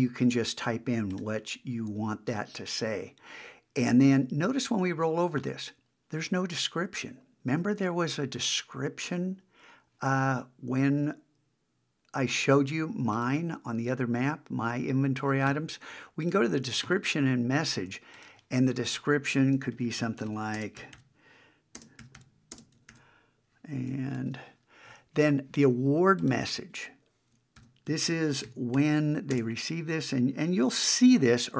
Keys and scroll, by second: 19.7 shift+w, 22.9 super+v, 24.2 shift+1, 27.6 shift+k.